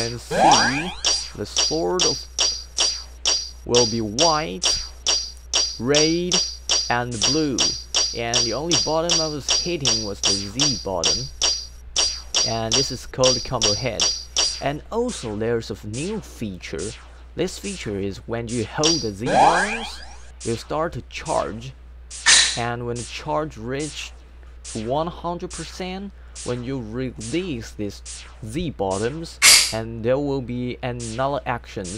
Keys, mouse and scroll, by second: 0.0-14.3 typing, 18.8 z.